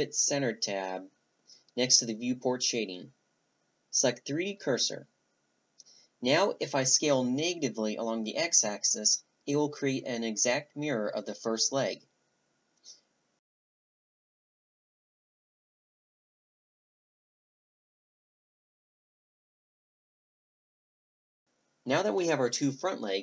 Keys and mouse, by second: 0.8 s, 10.2-13.6 middle drag, 13.4 a, 13.6 z, 13.6 right click, 13.7 z, 13.8 a, 14.9 a, 15.7 ctrl+z, 16.4 a, 16.6 b, 17.2 shift+d, 17.5 s, 19.2 a, 19.4 middle click, 19.4 a, 20.5-22.6 drag, 21.7 a, 22.7 click.